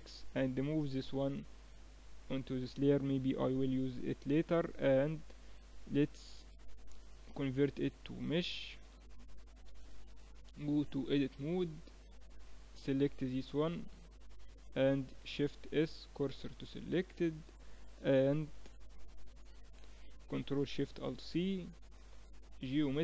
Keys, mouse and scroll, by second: 0.7 m, 4.5-6.4 drag, 7.1 alt+c, 8.7 Tab, 10.1 shift+b, 12.1-15.5 drag, 15.5 shift+s, 17.3 Tab, 18.8-20.7 middle drag.